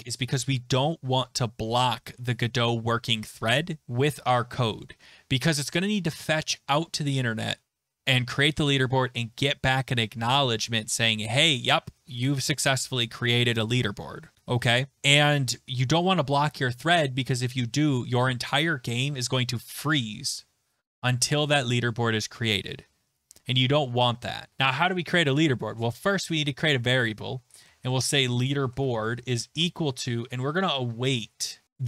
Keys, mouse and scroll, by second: 24.5 click, 25.3-26.3 typing, 27.4-31.8 typing, 31.6-31.8 scroll.